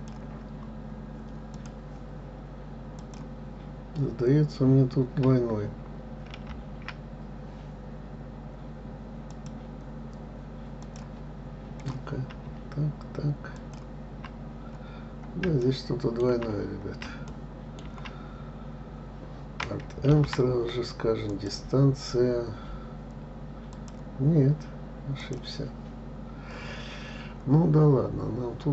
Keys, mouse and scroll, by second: 0.0-1.5 right drag, 1.5 click, 3.0 click, 6.3 alt+m, 10.8 click, 11.8 click, 13.5 shift+click, 15.0-15.6 scroll up 3, 15.6 shift+middle click, 16.5-17.2 scroll up 2, 17.2 shift+middle click, 17.8-18.6 scroll up 1, 20.0 alt+m, 23.7 click, 25.2 click, 27.7 scroll down 2.